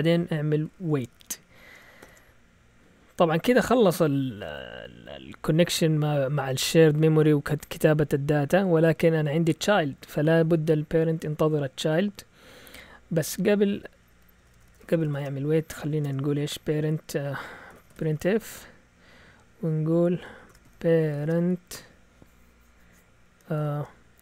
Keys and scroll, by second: 0.4-2.0 typing, 14.1 Right, 14.3-15.0 typing, 16.0 Tab, 17.4-18.6 typing, 20.2-21.8 typing, 23.5 typing.